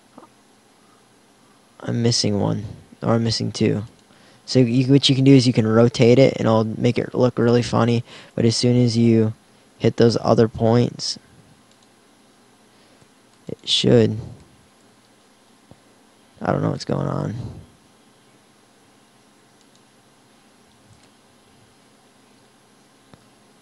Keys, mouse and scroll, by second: 4.6 r, 7.6 click, 18.3 alt+r.